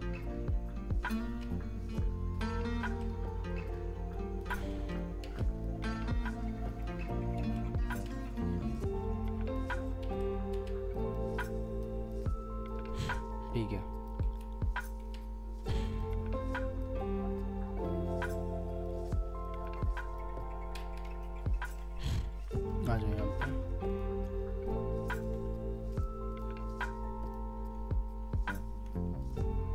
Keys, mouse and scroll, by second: 2.3 alt+w, 2.9 alt+w, 3.7 alt+click, 5.2 alt+w, 5.6 alt+middle click, 5.8 w, 7.1 alt+scroll up 1, 7.4 alt+w, 8.7 alt+click, 10.5 alt+w, 10.9 alt+middle click, 11.0 w, 11.4 alt+click, 12.1 alt+middle click, 14.2 middle click, 15.0 w, 16.0 alt+middle click, 19.5 alt+scroll up 1, 20.0 middle click, 20.3 scroll up 1, 20.7 w, 21.2 alt+middle click, 21.9-22.4 scroll up 1, 22.4 middle click, 22.9 scroll up 1, 23.4 ctrl+Left, 24.3 scroll down 1, 24.6 alt+middle click, 25.9 ctrl+click, 27.8 scroll down 1, 28.5 ctrl+scroll up 1, 29.2 ctrl+click, 29.5-29.7 scroll down 1.